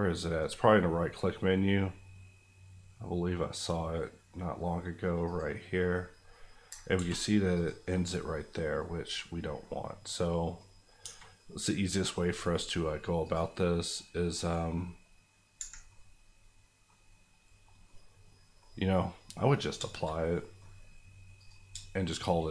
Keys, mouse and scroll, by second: 0.4 right click, 5.2 click, 6.3 middle click, 6.9 ctrl+z, 7.5 click, 7.9-10.8 middle drag, 11.0 Tab, 11.3 middle click, 13.2 click, 15.6 Escape, 15.9-19.7 middle drag, 21.3 click.